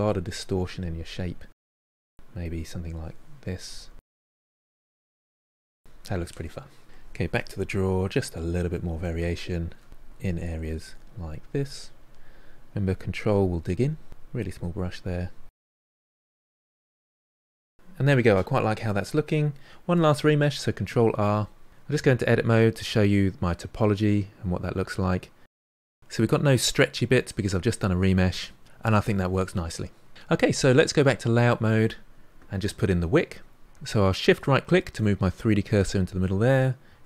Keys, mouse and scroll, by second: 2.3 middle click, 3.2 click, 3.8-6.9 middle drag, 6.9 click, 7.1 f, 7.7 ctrl+middle click, 8.2 f, 8.3-10.2 drag, 10.2 f, 10.4-11.5 drag, 11.5 middle click, 11.7 click, 12.7 middle click, 12.9 ctrl+click, 13.8 middle click, 13.9 ctrl+click, 14.3 middle click, 14.5 ctrl+click, 14.9 middle click, 15.0 ctrl+click, 16.0 middle click, 16.2 ctrl+click, 16.6-18.7 middle drag, 20.3 ctrl+r, 21.9 Tab, 22.3-22.6 scroll up 3, 22.6-24.8 middle drag, 24.9-31.1 shift+middle drag, 31.1 click, 34.2-35.0 shift+right drag, 35.0-37.0 middle drag.